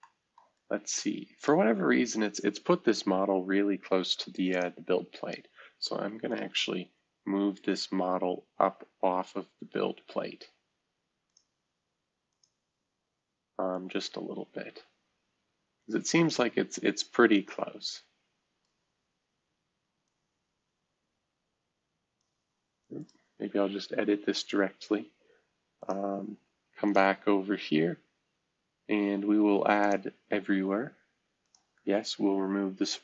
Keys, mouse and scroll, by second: 0.0-0.3 middle drag, 0.5-2.9 right drag, 3.2 Escape, 4.5-6.1 drag, 6.3 click, 7.8-9.3 scroll up 1, 11.3-16.3 drag, 16.8-18.7 middle drag, 20.0-22.2 drag, 23.0 click, 25.8 click, 25.8 typing, 26.9-28.4 drag, 29.8 click, 31.4-33.0 drag.